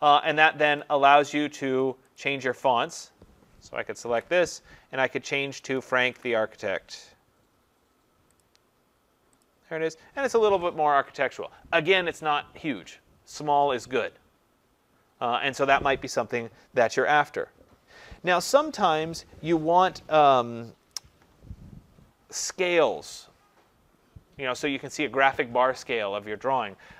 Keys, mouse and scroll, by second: 0.8 click, 2.2 click, 2.4 click, 4.1 ctrl+a, 5.6-6.8 typing, 5.6 click, 8.4 click, 9.5 click.